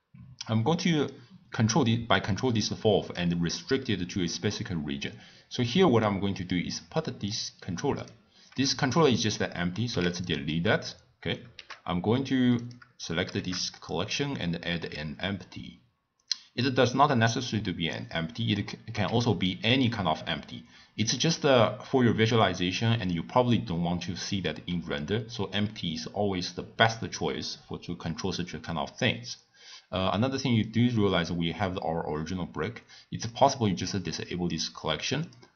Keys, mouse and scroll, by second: 1.1-4.1 drag, 7.3 click, 8.0 click, 9.9 x, 11.5 shift+a, 12.6 click, 13.3 shift+a, 18.9 s, 30.6 click, 33.3 click, 33.9 click, 35.2 click.